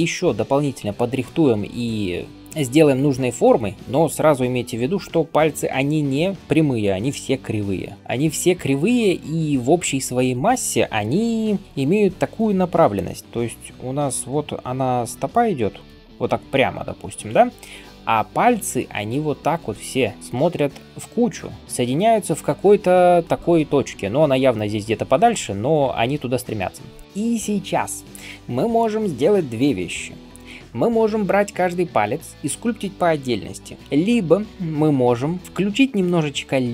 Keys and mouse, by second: 2.9 [, 3.0 [, 3.0 [, 3.1 [, 8.3-36.4 drag, 8.3-30.3 middle drag, 8.3-27.0 right drag, 13.2 d, 14.1 d.